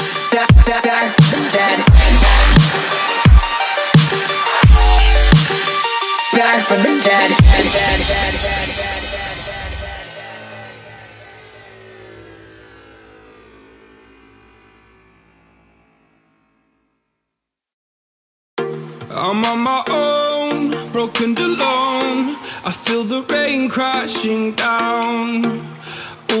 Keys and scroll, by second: 2.0 BackSpace, 3.2 space, 3.7 space, 3.8 space, 18.4 m.